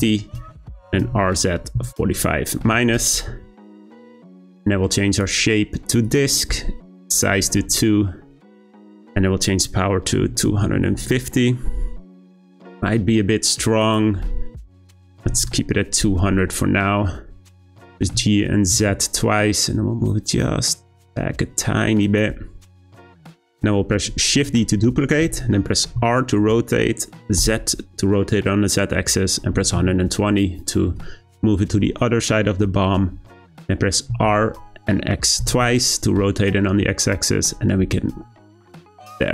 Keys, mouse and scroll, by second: 0.9 r, 5.1-10.1 drag, 12.6 click, 13.8-15.2 drag, 15.2 0, 17.5 g, 24.4 shift+d, 34.1 r.